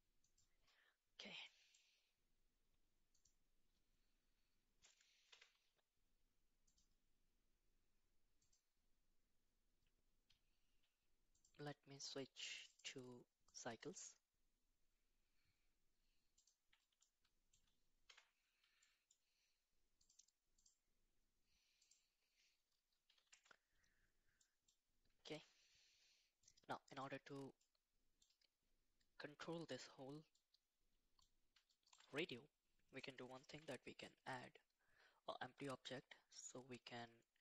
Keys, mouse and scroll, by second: 1.4 middle click, 3.1 click, 5.3 t, 6.7-7.8 drag, 8.4 click, 11.3 click, 12.7-14.6 drag, 17.3 middle click, 18.0 t, 18.9 middle click, 20.0-23.3 drag, 24.4 middle click, 25.2 shift+a, 26.4-27.2 middle drag, 27.6 middle click, 30.3-31.5 middle drag, 31.7-32.2 shift+middle drag, 33.5 shift+a.